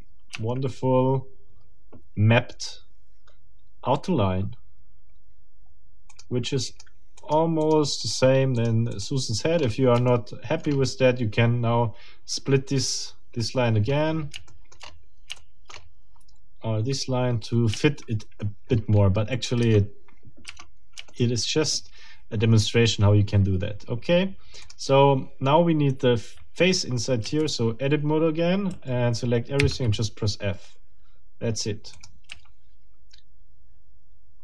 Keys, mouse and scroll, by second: 0.3 Tab, 6.1 middle click, 6.7 middle click, 7.2 middle click, 7.6 middle click, 8.0 middle click, 8.6 middle click, 8.8 click, 8.9 middle click, 9.6 scroll up 2, 10.1 shift+middle click, 10.7-11.0 shift+scroll up 2, 13.8-14.4 scroll down 5, 14.5 shift+middle click, 14.8-15.1 shift+scroll up 2, 15.4 shift+middle click, 15.7-16.0 shift+scroll up 2, 18.6-19.0 shift+scroll down 2, 19.6 Tab, 21.1 shift+middle click, 24.6 middle click, 27.2 a, 28.7 a, 29.6 f, 31.9 click, 33.0 a.